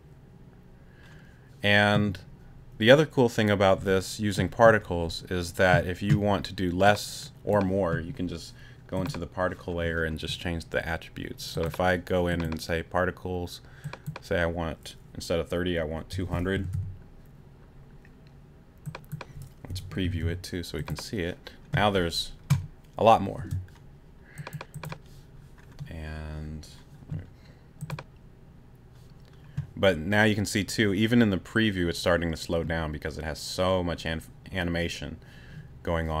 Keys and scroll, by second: 16.1 2, 16.5 0, 19.7 2, 20.0 0, 23.4 space.